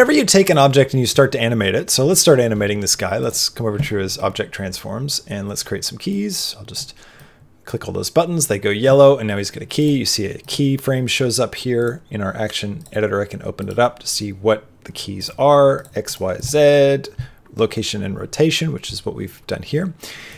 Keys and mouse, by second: 0.4 click, 3.1 click, 6.0-8.4 drag, 9.8 click, 10.3 click, 12.7 click, 15.7 click, 16.0 click, 20.2 click.